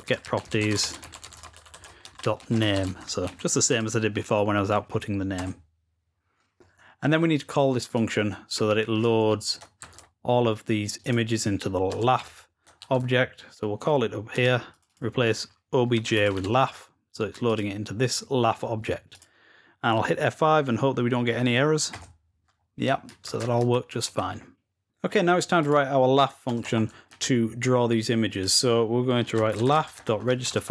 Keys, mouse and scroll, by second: 0.0 Escape, 1.2 Escape, 8.8 click, 10.9-12.4 drag, 14.6 click, 14.8 click, 17.4 click, 18.9 click, 25.4 click, 28.2 click.